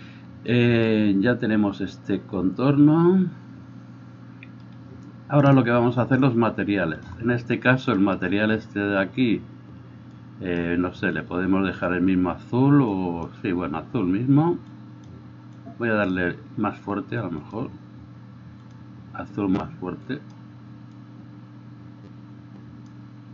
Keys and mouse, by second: 7.0-13.5 drag, 13.5-14.8 middle drag, 14.8-17.5 drag, 17.5-18.6 middle drag, 18.6-23.3 drag.